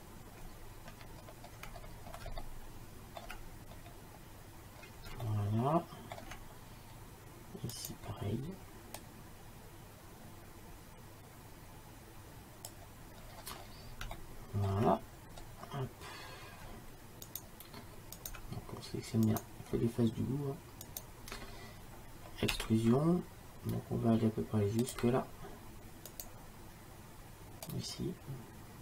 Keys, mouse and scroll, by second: 1.1-4.0 middle drag, 7.8-9.1 drag, 13.3-17.3 middle drag, 17.3-23.1 drag, 22.6 e, 26.2-27.7 right drag, 27.7 middle click, 28.1-28.8 drag.